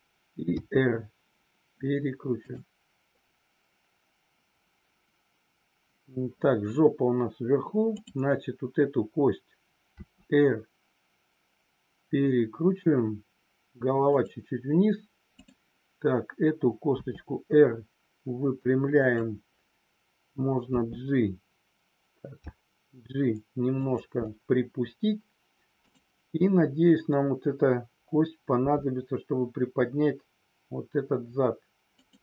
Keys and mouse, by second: 0.5 r, 9.8 r, 16.9 r, 19.0 click, 22.4-24.0 g, 23.8 click, 31.9 click.